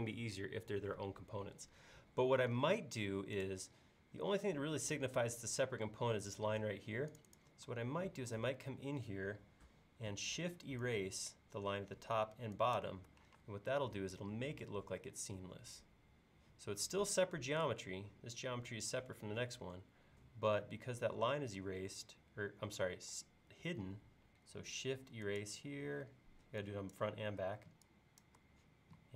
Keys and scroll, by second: 8.2 e, 13.4 space, 23.1 e.